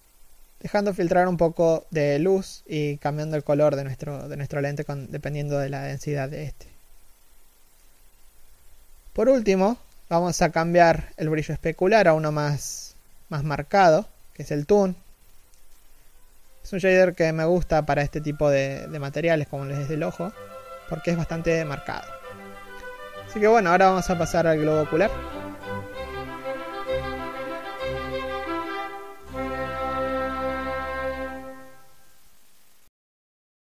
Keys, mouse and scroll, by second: 20.5 scroll down 1, 20.8 KP_1.